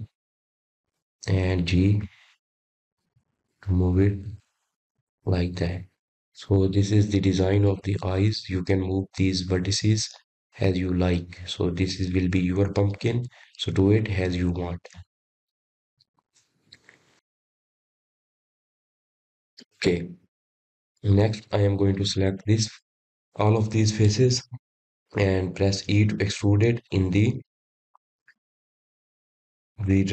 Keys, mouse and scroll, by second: 3.7-4.3 scroll down 1, 4.5 click, 5.7 g, 9.3 click, 25.0 click, 26.7-27.2 scroll down 1, 27.2 middle click, 28.1-29.5 scroll down 1, 29.5 e.